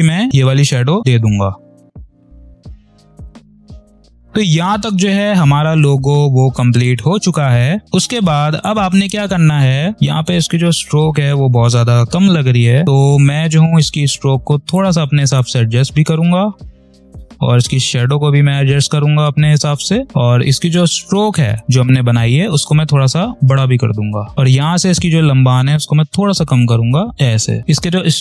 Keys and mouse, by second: 2.6 3, 2.6 click, 3.2 space, 3.3 click, 3.4 space, 4.8 v, 5.1 click, 9.0 space, 9.1 click, 9.5 space, 12.4 click, 12.8 space, 13.1 p, 14.6-20.8 ctrl+drag, 20.8 v, 21.2 click, 23.9 click, 24.3 p, 24.6-27.5 ctrl+drag, 27.6 v, 27.7-28.2 drag.